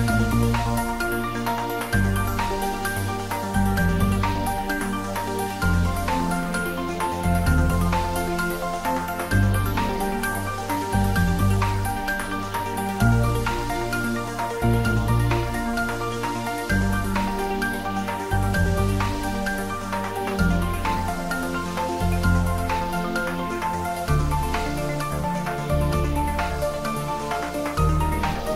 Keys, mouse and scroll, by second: 1.2-1.5 shift+scroll down 1, 2.4 shift+click, 3.0-3.9 middle click, 4.3-4.9 scroll up 1, 4.9-5.5 middle drag, 6.5 alt+shift+click, 7.5-9.4 middle drag, 10.2 click, 11.8 e, 12.1 s, 17.3 click, 17.6 scroll down 1, 18.4-19.3 middle drag, 21.2 click, 21.8-22.4 scroll up 1, 22.4-23.3 middle drag, 24.4 3, 25.5 click, 26.4 alt+shift+click.